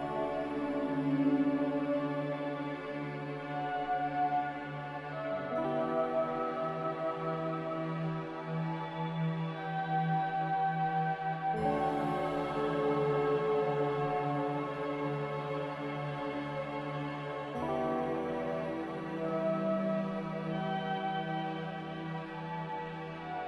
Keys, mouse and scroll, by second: 8.9 g, 10.1 g, 21.7 z.